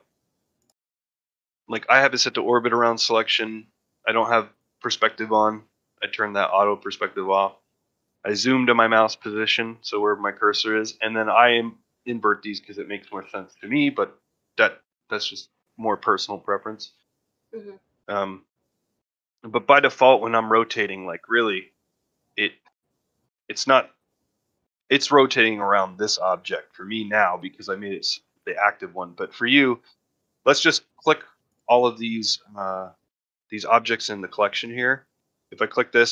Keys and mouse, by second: 19.1-19.5 middle drag, 19.6 shift+middle drag, 20.5-20.8 middle drag, 21.0 shift+middle drag, 21.5 ctrl+middle drag, 21.9 shift+middle drag, 22.3-22.6 middle drag, 22.9 middle drag, 23.2 shift+middle drag, 23.7 ctrl+middle drag, 24.0 middle drag, 24.5 middle drag, 24.9-25.3 middle drag, 25.4 middle drag, 25.8 middle drag, 26.1 middle drag, 26.5 middle drag, 26.8 middle drag, 28.0 click, 28.9 shift+middle click, 29.3 ctrl+middle click, 30.8 click.